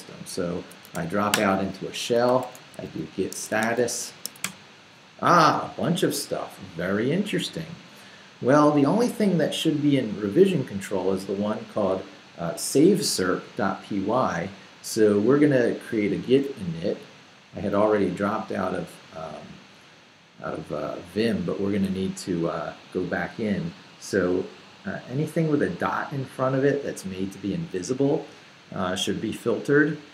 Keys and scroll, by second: 0.6-4.7 typing, 1.3 Return.